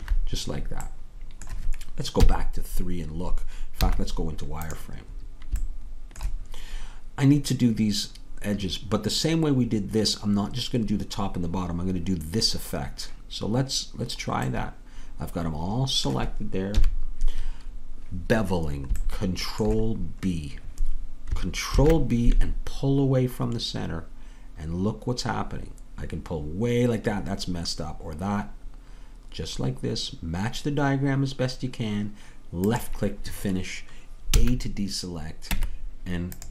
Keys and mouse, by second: 2.3 KP_3, 3.8 z, 16.8 KP_3, 21.7 ctrl+b, 34.3 a, 35.5 Tab.